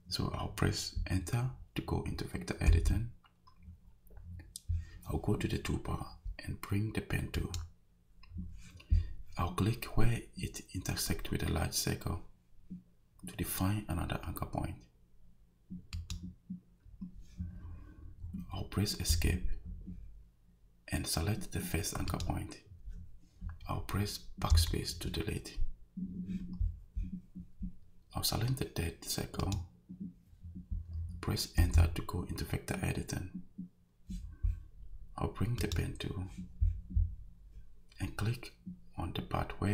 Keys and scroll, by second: 2.7 Return, 19.1 Escape, 24.5 BackSpace, 31.6 Return.